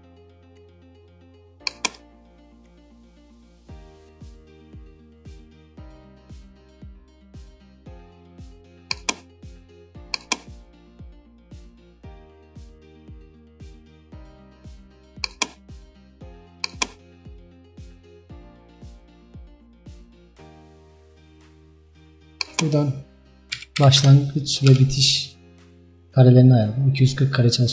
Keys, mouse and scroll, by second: 24.8-27.7 drag.